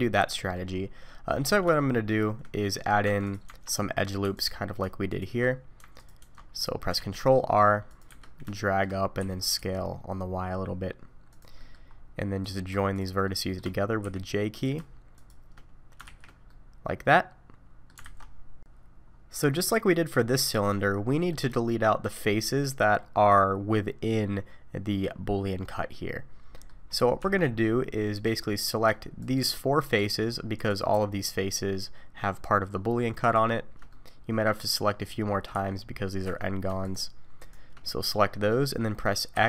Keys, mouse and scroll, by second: 0.7-1.8 scroll down 6, 1.1 middle click, 1.8 shift+middle click, 2.6 middle click, 3.0 Tab, 3.2 click, 3.5 Tab, 4.3 alt+click, 5.1 alt+shift+click, 5.8 Tab, 6.0 click, 6.3 middle click, 7.0 ctrl+r, 8.6 shift+middle click, 9.2 s, 11.6 middle click, 11.9-12.4 scroll up 2, 12.4 click, 12.9 shift+click, 13.3 shift+middle click, 14.0 j, 14.5 click, 15.2 shift+click, 16.0 shift+r, 16.5 middle click, 18.0 alt+a, 19.0-19.4 scroll down 4, 19.4 middle click, 20.6-21.2 scroll up 1, 21.2 middle click, 21.2-22.1 scroll up 3, 22.1-23.2 scroll up 3, 23.2-23.7 scroll down 1, 26.6 middle click, 26.6 scroll down 2, 26.9-28.1 scroll up 3, 27.2 3, 28.1 click, 29.2 shift+click, 30.0 shift+click, 30.6 click, 33.2 shift+click, 33.9 middle click, 35.5 1, 36.2 3, 36.8 shift+click, 37.4 shift+click, 38.0 middle click, 39.3 x.